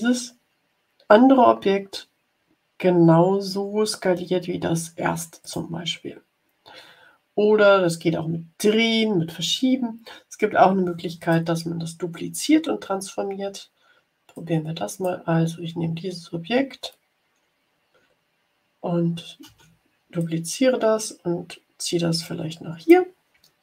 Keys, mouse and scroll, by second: 5.4 click, 11.1 click, 14.3-15.4 drag, 19.4 ctrl+d, 20.1-23.0 drag.